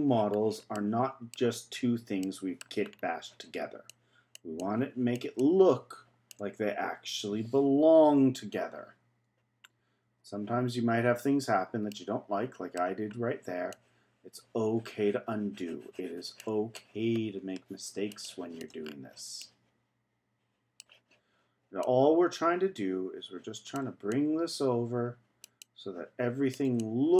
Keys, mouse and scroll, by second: 0.3-0.8 scroll down 1, 0.8-1.8 middle drag, 1.8-2.2 scroll up 1, 2.2 middle click, 2.9-3.9 scroll down 2, 3.9-6.7 drag, 6.7-7.3 scroll up 2, 7.3-8.1 scroll up 1, 8.9 z, 9.7 scroll down 1, 10.8 z, 10.9-11.9 scroll up 1, 11.9-13.1 middle drag, 13.1-13.7 scroll up 1, 13.7-18.8 drag, 18.8-19.4 scroll down 3, 19.4-21.8 middle drag, 21.8-27.1 drag.